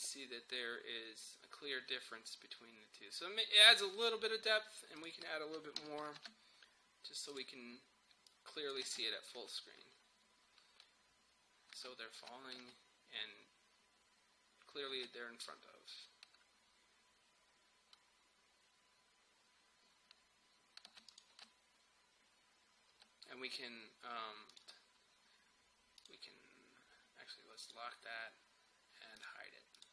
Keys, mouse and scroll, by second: 5.8 typing, 6.2 Return, 7.3 click, 9.0 space, 11.8 space, 15.0 space, 20.9 space, 21.1 click, 21.4 space, 24.5 click.